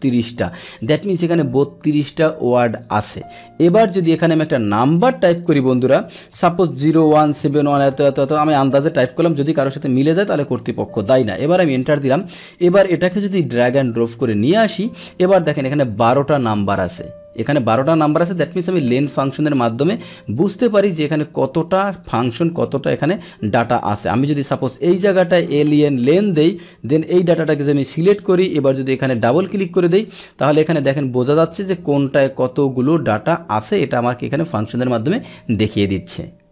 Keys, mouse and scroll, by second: 0.0 click, 3.9 click, 11.5 Return, 13.0 click, 14.0 click, 15.6 click, 22.1 click, 23.2 click, 24.2 click, 26.1 Tab, 26.4 Left, 26.6 Left, 27.7 Return, 28.3 click, 29.1 click, 29.2 click, 30.0 click.